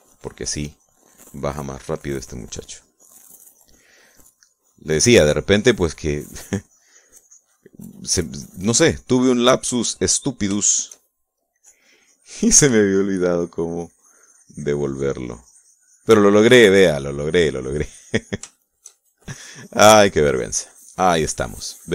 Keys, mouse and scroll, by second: 0.1 middle click, 0.8-11.3 drag, 11.8 shift+middle click, 11.9 shift+middle click, 12.9-20.6 shift+drag, 20.7-21.9 shift+drag.